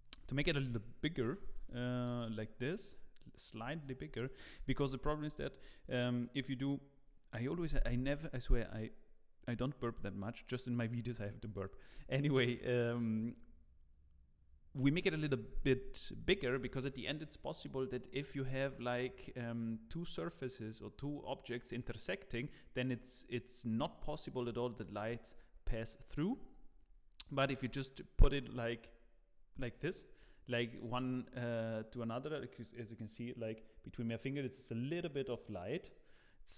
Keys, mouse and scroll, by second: 0.2 Tab, 3.8-4.2 scroll up 3, 4.2 shift+middle click, 4.7-5.2 scroll down 1, 5.2 Tab, 5.2-6.9 scroll down 2.